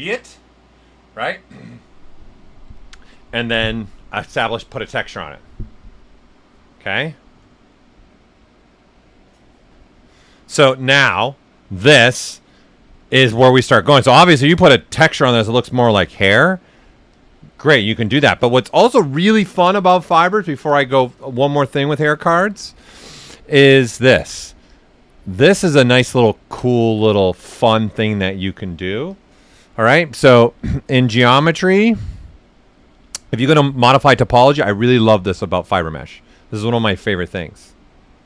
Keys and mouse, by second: 11.5 right click, 14.1 click, 17.1 click, 23.8-33.6 drag.